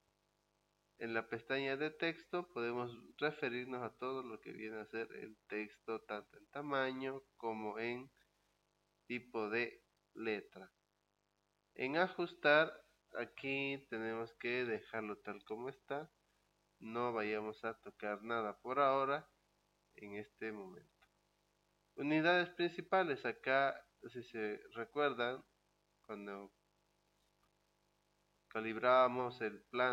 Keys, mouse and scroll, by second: 1.1 click, 12.1 click, 20.7 click.